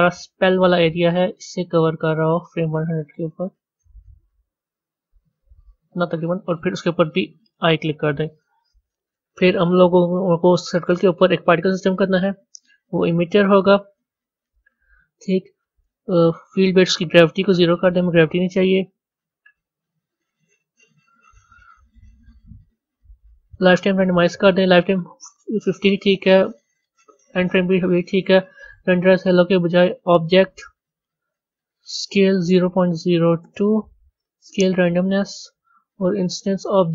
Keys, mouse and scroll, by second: 12.1 click, 17.4-33.4 drag, 33.4 KP_0, 34.7-36.9 drag.